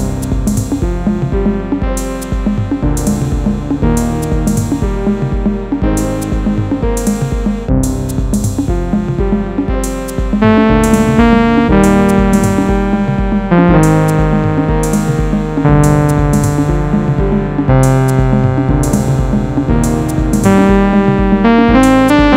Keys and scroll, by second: 0.2 ctrl+d, 3.4 ctrl+d, 3.8 Right, 5.6 Delete.